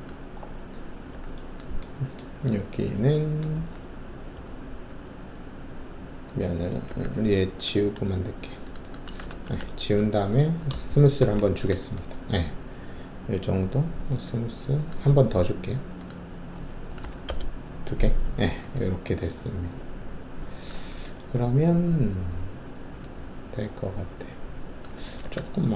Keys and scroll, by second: 3.5 alt+2, 6.8 alt+3, 9.3 ctrl+shift+`, 9.9 ctrl+`, 11.2 shift+q, 16.9 2, 17.2 Return.